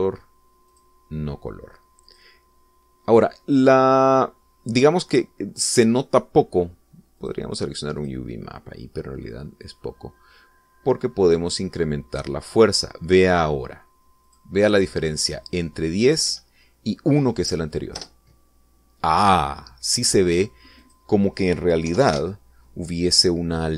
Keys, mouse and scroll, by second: 1.0 click, 2.2 click, 3.5 click, 8.7 click, 9.5 click, 11.2-13.9 drag, 15.8 click, 17.8 1, 19.5 Return, 22.3 click, 23.4 1, 23.5 0, 23.6 Return.